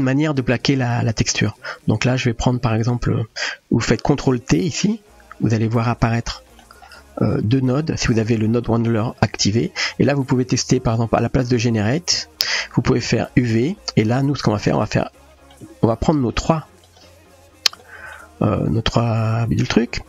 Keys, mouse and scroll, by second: 0.2 shift+a, 4.9 ctrl+t, 6.2 middle click, 8.2 middle click, 13.2 middle drag, 14.8 Tab, 15.3 middle click, 16.0 Tab, 16.2 shift+click, 16.8 shift+click, 18.1-18.5 middle drag.